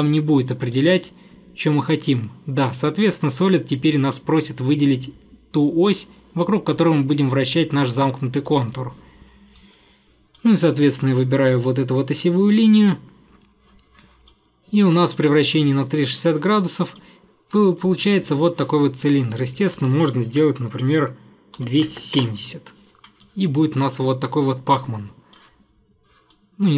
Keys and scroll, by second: 21.4-22.5 typing.